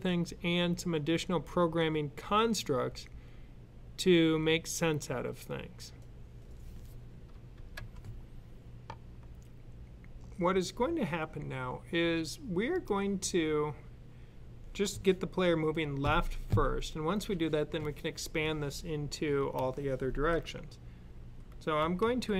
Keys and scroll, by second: 21.6-22.1 typing.